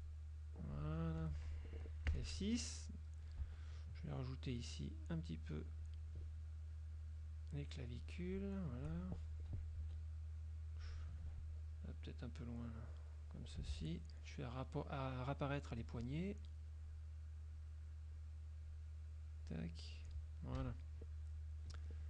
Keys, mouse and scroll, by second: 0.1 click, 1.3 F1, 2.2 F6, 2.6-3.3 drag, 4.6-5.4 shift+drag, 5.9 shift+click, 7.1 shift+click, 8.1 shift+click, 9.9 F2, 10.1 click, 11.9-13.1 drag, 15.9 click, 16.9 click, 18.2 click, 18.7 click, 19.5 click, 20.7 KP_Subtract, 21.4 click.